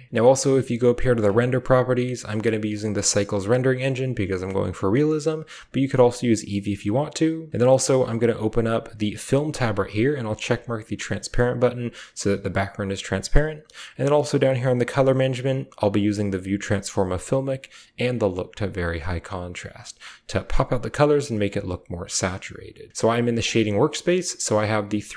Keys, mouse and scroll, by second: 2.6-3.2 drag, 5.5 click, 7.3 click, 10.0 click, 11.6 click, 18.4 click, 21.3 click, 23.2 click, 24.3 scroll up 1, 25.0 shift+middle click.